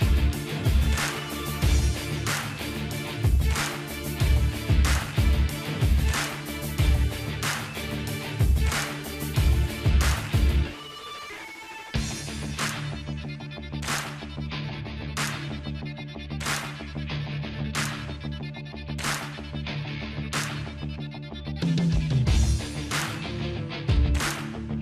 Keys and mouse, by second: 0.0 Delete, 0.0 middle click, 0.4-1.8 drag, 1.2 Delete, 1.8 middle click, 2.7-5.7 drag, 5.1 Delete, 5.7-6.9 middle drag, 6.9-11.9 drag, 11.9 middle click, 12.0-13.1 drag, 13.3-15.6 drag, 17.0-19.4 drag, 19.4 middle click, 19.6-21.3 drag, 21.9-23.3 middle drag, 23.3-24.3 drag, 24.5-24.8 drag.